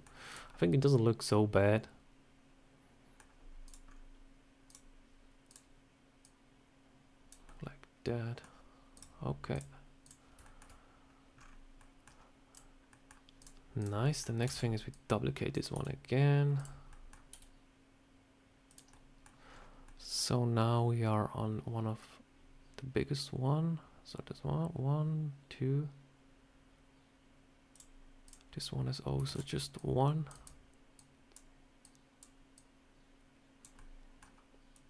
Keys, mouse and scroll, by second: 0.2 click, 0.4 scroll up 1, 0.5 middle click, 3.5 click, 3.8 scroll up 2, 4.6 click, 5.4 click, 6.1 click, 7.3 middle click, 8.8 click, 9.4 click, 10.3 shift+middle click, 12.4 click, 12.8 middle click, 13.3 click, 13.7 click, 13.9 middle click, 14.4 shift+d, 14.8 click, 15.6 s, 16.8 middle click, 17.2 s, 18.8 middle click, 27.6 click, 28.1 click, 29.2 shift+d, 29.6 click, 30.2 click, 30.8 click, 31.7 click, 32.4 click, 33.6 middle click, 34.6 click.